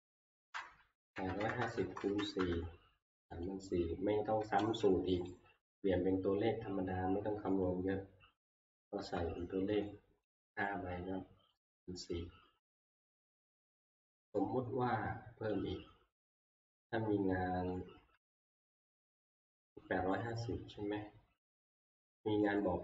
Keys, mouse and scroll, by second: 0.8-2.6 typing, 3.5 click, 4.6 ctrl+c, 4.6 click, 5.3 ctrl+c, 5.3 right click, 7.8 click, 9.0 Escape, 9.8 scroll, 9.9 click, 10.4 right click, 10.4 scroll, 11.7 click, 15.6 click, 15.7 click, 16.8-17.3 scroll, 17.3 scroll down 9, 18.9 middle click, 20.2 click, 20.7 scroll, 22.6 click.